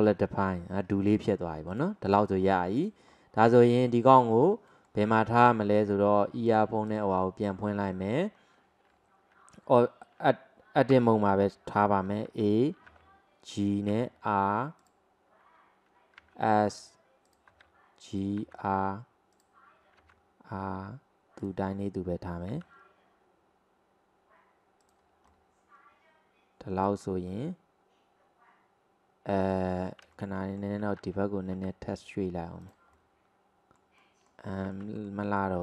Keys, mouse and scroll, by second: 1.1 drag, 2.1 click, 2.5-2.8 scroll down 2, 2.8 drag, 3.1-3.6 scroll up 1, 3.6 click, 4.3 alt+middle click, 6.5 click, 6.9 click, 7.5-8.4 scroll down 2, 8.4-10.3 scroll down 2, 11.0 Tab, 12.1 a, 12.9 g, 14.0 r, 16.3 s, 17.5 g, 18.5 r, 20.1 r, 21.7-22.6 scroll up 2, 22.6 g, 25.3-30.2 middle drag, 31.6 g, 33.0-35.0 middle drag.